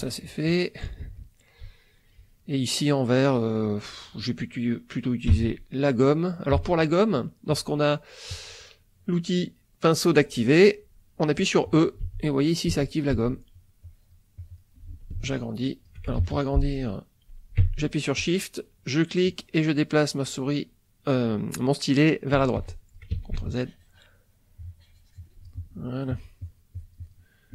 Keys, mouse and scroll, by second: 1.8 ctrl+middle click, 2.4 ctrl+middle click, 5.3 e, 6.5 e, 9.1-10.2 drag, 12.0 e, 12.7 e, 13.8 click, 15.1 shift+click, 16.2 ctrl+shift+z, 18.2-22.5 shift+drag, 22.9 click, 23.2 ctrl+z, 23.5-25.6 ctrl+drag, 26.1-27.3 drag.